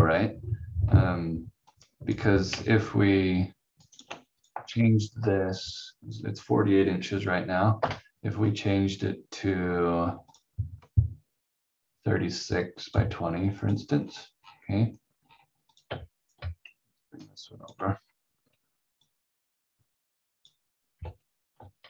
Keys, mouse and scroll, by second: 0.2 scroll down 1, 1.6 click, 3.8 ctrl+right click, 7.8 Delete, 10.3 click, 14.0-14.4 scroll down 1, 16.2 shift+click, 16.8 ctrl+click, 18.0-18.3 scroll up 1, 19.0 click, 21.0 v, 21.5 v.